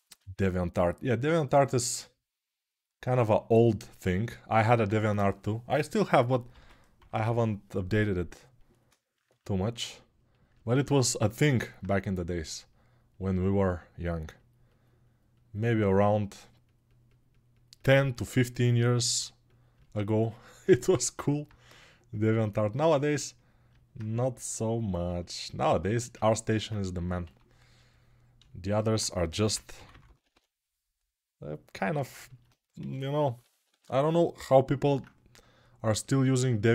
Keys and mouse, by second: 3.3-10.3 right drag, 6.3 g, 10.3-36.7 alt+shift+drag, 27.0 1, 32.6 g, 33.5 ].